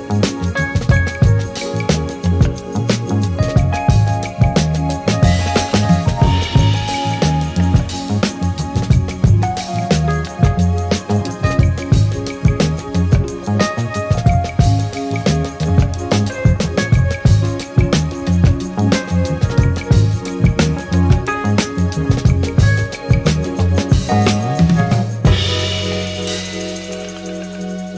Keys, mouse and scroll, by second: 0.2 click, 0.5 ctrl+middle click, 0.6 click, 0.6 middle click, 0.7 click, 0.8 middle click, 0.9 click, 1.4 click, 1.5 middle click, 1.6 click, 1.7 f, 1.7 click, 2.1 click, 2.1 middle click, 2.2 click, 2.3 click, 2.5 click, 2.7 click, 2.7 middle click, 3.0 click, 3.2 click, 3.4 click, 3.5 middle click, 3.5 click, 3.6 f, 3.8 click, 3.9 click, 4.1 click, 4.5 middle click, 5.2 middle click, 5.3 click, 5.4 click, 5.4 middle click, 5.6 click, 5.8 middle click, 5.8 click, 6.0 click, 6.8 shift+middle click, 7.0 f, 7.3 click, 7.5 middle click, 7.5 click, 7.6 f, 7.8 middle click, 7.9 click, 7.9 middle click, 8.2 f, 8.3 click, 8.5 click, 8.8 click, 8.9 middle click, 8.9 click, 9.0 click, 9.1 middle click, 9.5 click, 10.0 middle click, 10.2 click, 10.3 click, 10.4 f, 10.4 click, 10.5 middle click, 10.5 click, 10.7 middle click, 10.8 middle click, 11.0 click, 11.1 click, 11.3 middle click, 11.5 click, 11.8 click, 11.9 click, 12.3 click, 12.5 middle click, 12.6 click, 12.8 shift+middle click, 12.8 click, 13.2 click, 13.9 middle click, 14.0 click, 14.2 middle click, 14.4 middle click, 14.8 middle click, 14.8 click, 15.0 middle click, 15.4 click, 15.5 middle click, 15.6 click, 15.7 middle click, 15.9 click, 15.9 middle click, 16.0 click, 16.0 middle click, 16.1 click, 16.1 middle click, 16.7 ctrl+middle click, 16.7 click, 17.0 click, 17.3 click, 17.5 click, 17.6 middle click, 17.7 ctrl+middle click, 17.8 click, 18.0 ctrl+z, 18.2 middle click, 18.3 click, 18.4 click, 18.7 click, 19.0 middle click, 19.1 click, 19.3 middle click, 19.4 click, 19.5 middle click, 19.5 click, 19.6 click, 19.8 click, 20.1 click, 20.2 middle click, 20.5 click, 20.8 click, 20.9 click, 21.1 middle click, 21.2 f, 21.3 click, 21.4 middle click, 21.5 click, 21.6 f, 21.6 click, 21.9 click, 21.9 middle click, 22.0 click, 22.4 ctrl+z, 22.6 click, 22.8 middle click, 22.9 ctrl+z, 23.1 click, 23.4 click, 23.7 click, 23.8 click, 23.9 middle click, 23.9 click, 24.0 click, 24.2 middle click, 24.2 click, 24.3 click, 24.8 middle click, 25.1 middle click, 25.2 middle click, 25.3 click, 25.4 click, 25.5 click, 25.7 click, 25.8 middle click, 26.0 click, 26.3 click, 26.5 middle click, 26.5 click, 26.8 middle click, 26.8 click, 27.0 click, 27.3 click, 27.4 ctrl+middle click, 27.6 f, 27.9 middle click, 27.9 click.